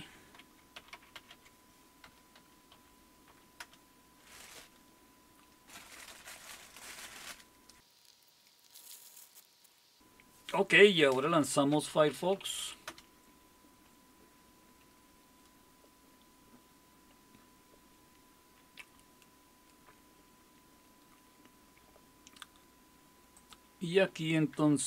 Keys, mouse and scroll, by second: 0.2-3.3 typing, 3.6 Return, 6.1 Return, 11.4-12.6 typing, 12.9 Return, 23.4-24.8 drag.